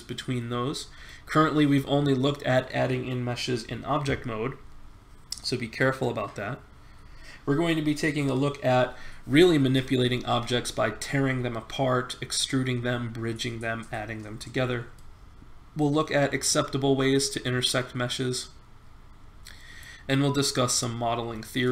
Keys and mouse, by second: 9.9-12.8 middle drag, 14.7-16.9 middle drag, 20.0-21.7 middle drag.